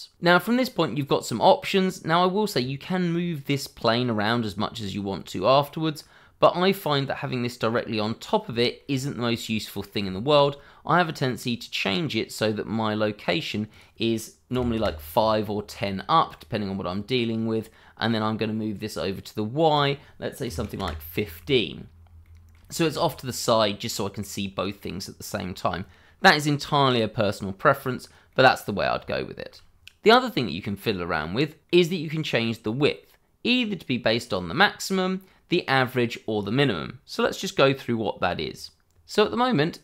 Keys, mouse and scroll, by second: 2.2 middle click, 6.2 scroll down 1, 6.5 middle click, 8.5 shift+middle click, 8.8-9.2 shift+scroll up 2, 9.2 middle click, 10.1 shift+middle click, 10.4-11.1 scroll up 1, 11.1 middle click, 13.7 click, 14.7 Return, 15.9-16.3 scroll down 1, 16.3 middle click, 19.7 click, 20.4 1, 20.5 5, 20.8 Return, 22.2 middle click, 22.7 shift+middle click, 23.0-23.5 scroll up 1, 23.5 middle click, 28.3 middle click, 29.1 shift+middle click, 29.9 middle click, 32.0-32.4 scroll up 1, 32.4 middle click, 33.6-33.9 scroll down 1, 33.9 middle click, 34.6 click.